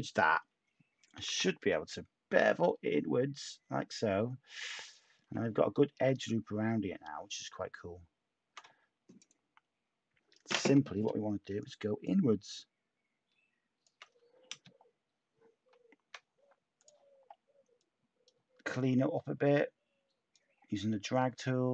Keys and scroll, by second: 1.1 b.